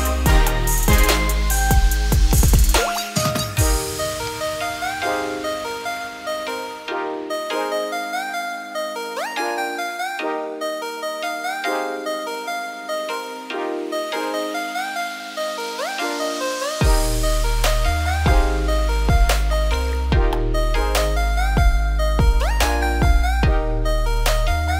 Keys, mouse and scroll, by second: 8.2 scroll up 1, 8.3 middle click, 8.7 1, 8.9-9.4 scroll up 2, 9.4 click, 9.8 click, 10.3 typing, 10.5 click, 10.8 middle click, 11.6 ctrl+b, 17.7 scroll down 2, 17.9 middle click, 18.3 typing, 19.0 click, 19.3 middle click, 20.0 ctrl+click, 20.3-23.1 middle drag, 23.1 shift+d, 24.3 p.